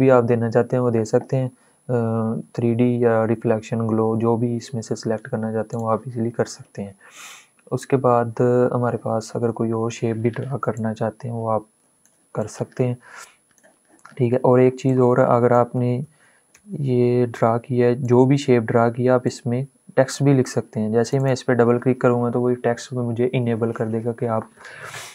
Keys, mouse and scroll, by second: 5.6 click, 10.8-12.0 shift+drag, 12.4 click, 14.8 click, 15.7 ctrl+z, 17.7-20.7 drag.